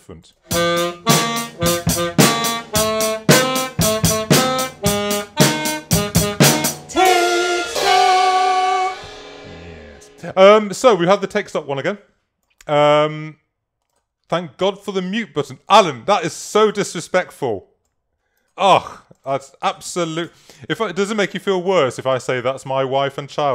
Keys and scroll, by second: 19.9 super+-.